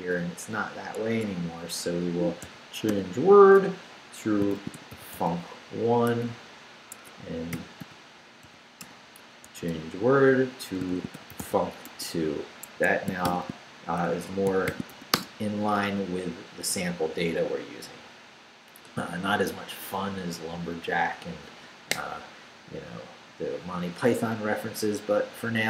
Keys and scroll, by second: 1.1 Escape, 2.4 c, 2.9 w, 4.3-6.1 typing, 6.9 Escape, 7.5 /, 7.8 l, 8.4 u, 8.8 Return, 9.5-13.3 typing, 12.6 Escape, 14.1 shift+Escape, 14.4-15.4 typing.